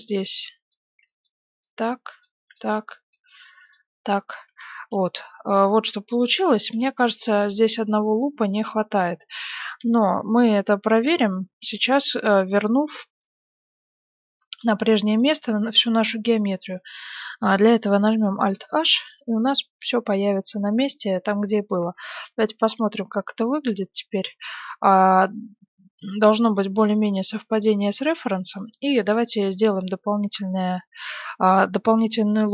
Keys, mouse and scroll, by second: 0.8 a, 1.0 b, 2.3 a, 2.4 click, 2.4 b, 4.0 click, 4.7 middle click, 4.9-8.1 middle drag, 6.7 z, 8.5-10.0 middle drag, 10.4-12.3 middle drag, 18.5 alt+h, 19.1-21.0 middle drag, 21.8 KP_1, 22.3-24.6 middle drag, 22.7 z, 26.7-29.0 middle drag, 27.8 z, 29.0 ctrl+r.